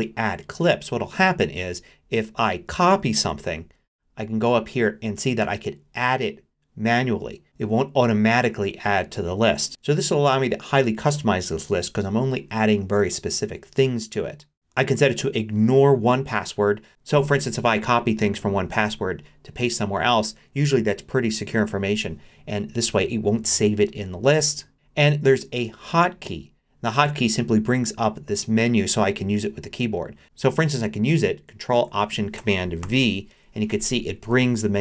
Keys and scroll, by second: 3.3 super+c, 32.8 ctrl+alt+super+v.